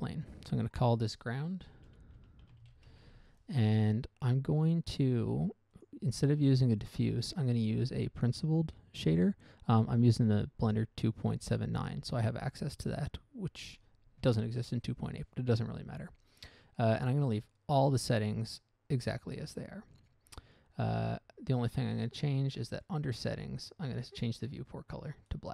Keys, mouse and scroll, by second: 1.1 click, 2.1-3.2 typing, 3.2 Return, 6.1 click, 7.2 click, 9.5 click, 20.4-21.0 scroll down 1, 21.0 scroll down 1, 21.7 scroll up 1, 21.9-22.4 scroll down 1, 22.4 scroll down 1, 23.1 click, 23.5-24.1 scroll down 1, 24.1 scroll down 1, 24.5 click, 25.2 click.